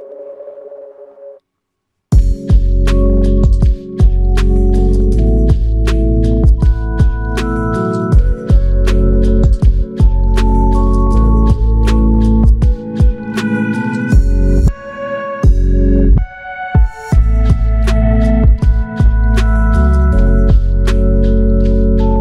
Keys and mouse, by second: 3.2-4.5 typing, 5.7 shift+click, 9.6 alt+shift+click, 13.0 double click, 14.1 ctrl+click, 16.3 ctrl+click, 17.5 w, 18.8 alt+click.